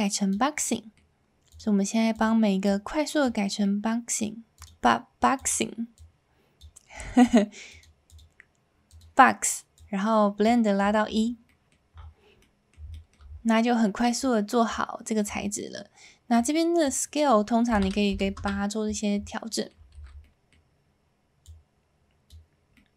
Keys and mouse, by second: 0.6 middle click, 1.6-2.3 drag, 2.6 click, 3.7 middle click, 4.6-5.5 drag, 6.0 click, 7.1 middle drag, 7.7 click, 8.2-9.0 drag, 9.7 click, 11.7 middle click, 12.4-12.8 middle drag, 12.9 shift+middle click, 16.5-18.8 drag, 19.5 middle click, 19.8 a, 20.2-20.6 middle drag, 21.5 click, 21.6 alt+a, 22.7-22.9 middle drag.